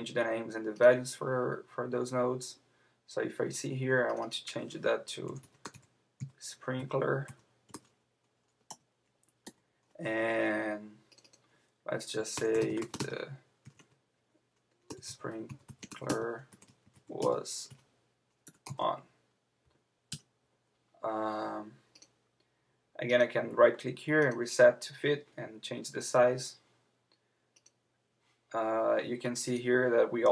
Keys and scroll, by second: 8.7 Return, 9.4 Tab, 20.1 Return.